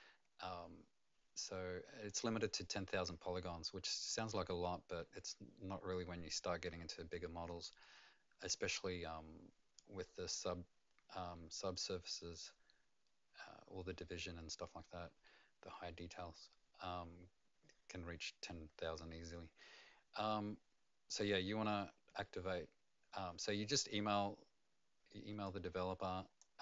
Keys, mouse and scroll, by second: 11.7 click, 23.8-25.4 scroll down 2, 25.4 click.